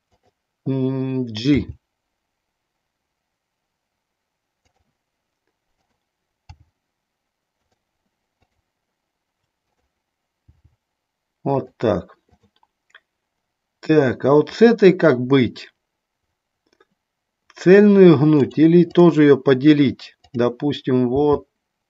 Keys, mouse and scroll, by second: 0.2 click, 1.7 g, 6.0 click, 7.7 click, 9.8 click, 10.6 g, 11.7 click, 12.4 click, 20.4 click, 21.4 g.